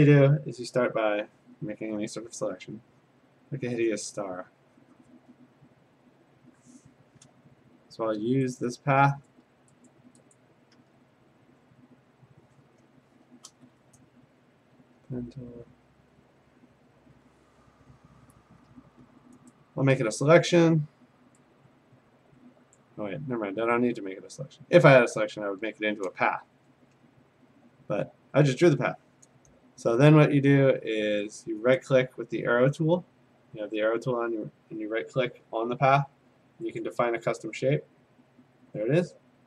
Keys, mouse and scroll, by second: 3.1 click, 6.3 click, 8.6 click, 9.3 click, 9.9 click, 10.4 click, 10.8 a, 13.7 p, 16.6 click, 19.1 a, 19.5 right click, 22.8 click, 31.8-34.9 right drag, 36.8-39.4 drag.